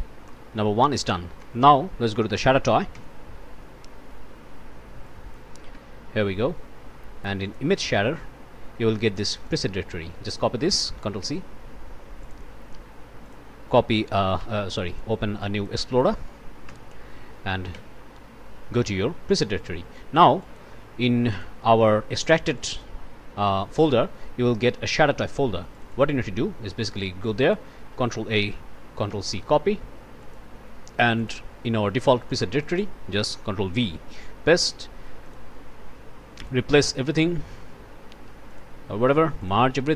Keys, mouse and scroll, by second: 0.3 click, 0.8 click, 1.4 Tab, 2.7 Down, 3.0 Return, 5.1 click, 5.7 1, 7.4 click, 9.0 click, 11.2 ctrl+c, 12.2 click, 13.3 click, 14.4 ctrl+n, 15.4 click, 16.7 ctrl+l, 17.2 ctrl+v, 19.6 click, 20.4 click, 21.3 click, 22.5 click, 23.8 click, 25.7 click, 27.4 click, 28.0 ctrl+a, 29.1 ctrl+c, 30.3 click, 31.2 click, 32.6 click, 33.7 ctrl+v, 35.2 click, 36.4 click, 38.5 click, 39.4 click.